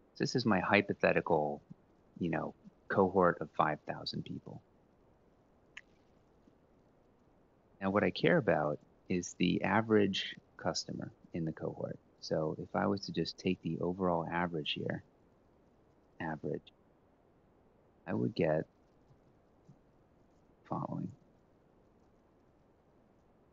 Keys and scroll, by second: 6.6 ctrl+Down, 13.2-17.0 typing, 18.3 Left, 18.3-20.5 typing, 20.7 Up, 21.9 shift+Down, 22.1 shift+Down, 22.6-23.5 typing.